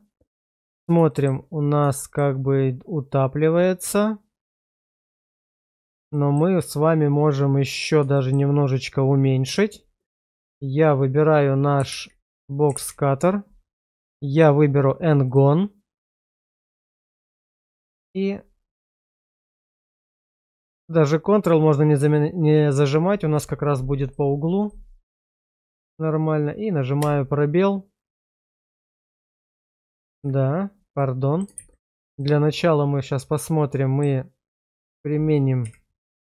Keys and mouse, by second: 1.1 shift+middle click, 2.0 shift+middle drag, 3.9-5.2 middle drag, 6.1 shift+middle click, 8.1 middle click, 11.9 alt+w, 12.7 alt+w, 14.0-15.7 drag, 18.1 click, 24.6 click, 27.3 space, 30.2 ctrl+z, 31.0-31.4 middle drag, 31.6 shift+z, 32.2-34.0 middle drag, 35.6 /.